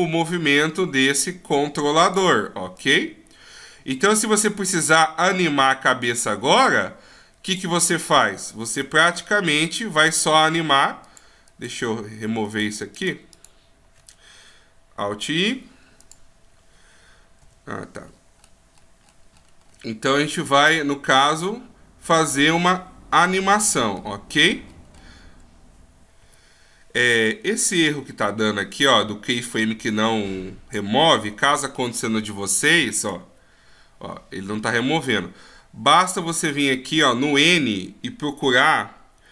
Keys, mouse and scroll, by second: 0.3 click, 2.7 click, 4.9 click, 8.8 click, 11.0 click, 11.5 click, 12.4 click, 13.0 click, 15.4 alt+i, 17.4 n, 18.1-18.5 scroll down 5, 18.4-20.1 scroll up 28, 20.7 scroll up 2, 21.4 scroll up 4, 22.3-23.7 scroll up 7, 23.7 scroll down 1, 24.7 scroll down 7, 28.9 click, 32.4 alt+i.